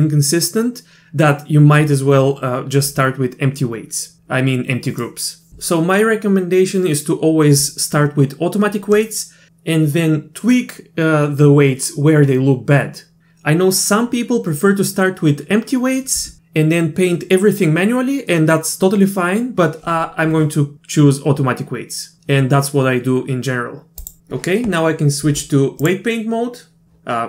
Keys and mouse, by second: 25.9-26.8 drag.